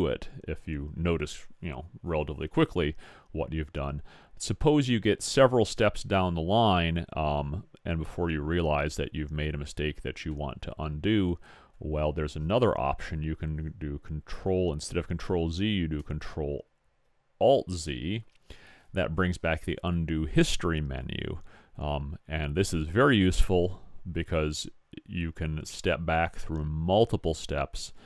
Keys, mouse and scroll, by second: 3.7-16.9 middle drag.